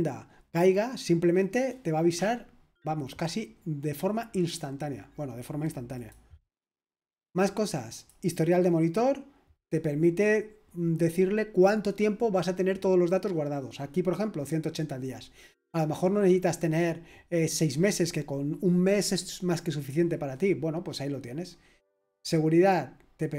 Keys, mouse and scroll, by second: 5.9-23.3 drag.